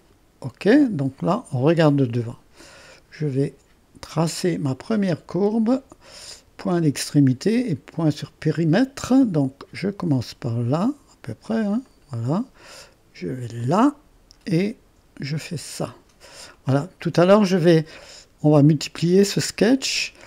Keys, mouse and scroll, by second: 0.0 click, 2.3-4.9 middle drag, 4.9 click, 8.2-11.2 drag, 11.9 click, 13.6 click, 15.6 click, 16.6-18.1 middle drag.